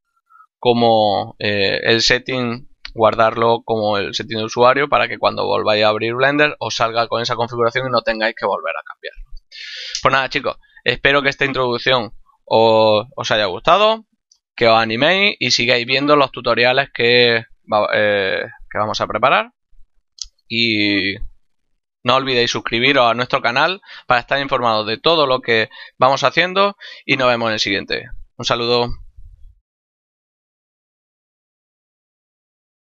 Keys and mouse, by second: 9.9 click, 11.1 middle click.